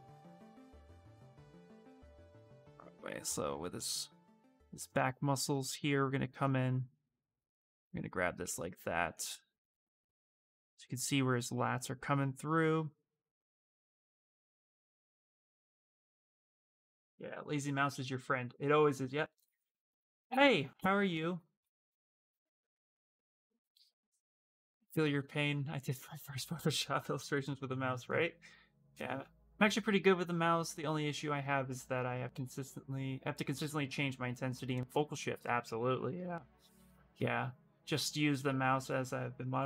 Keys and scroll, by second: 0.8 ctrl+z, 1.6 ctrl+z, 2.0 ctrl+z, 2.4 ctrl+z.